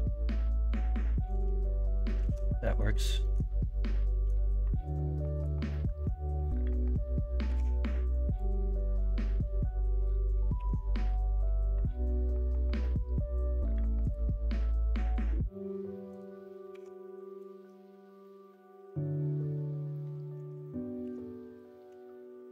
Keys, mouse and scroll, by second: 0.1 l, 2.2 ctrl+z, 2.6 middle click, 3.2 middle click, 3.7 middle click, 5.2 KP_1, 5.4 KP_3, 7.4 1, 8.2 click, 10.5 3, 16.7 1, 21.0 ctrl+r.